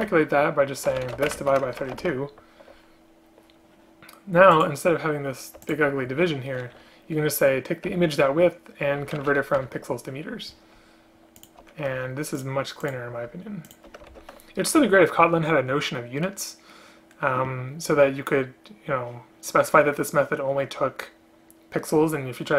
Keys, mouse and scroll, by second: 0.0 space, 1.2 space, 1.4 space, 5.7 shift+click, 9.7 Return, 11.5 shift+click, 12.1 ctrl+c, 13.8 shift+click, 14.2 ctrl+v.